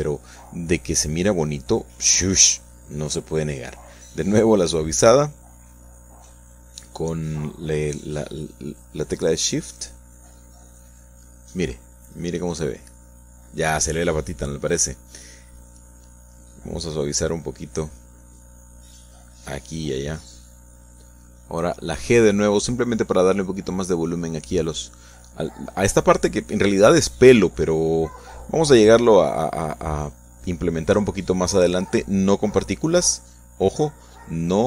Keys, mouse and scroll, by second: 0.1-5.7 shift+drag, 6.3 click, 7.0 click, 7.6 click, 8.7 shift+click, 9.3 shift+click, 10.6 KP_1, 11.3 KP_Subtract, 12.7 shift+click, 19.8-20.8 drag, 21.5 click, 22.3 g, 23.0 click, 23.5-27.6 drag, 27.7 click, 28.5 click, 28.9 click, 29.5 click, 30.6 click, 31.4-34.1 shift+drag.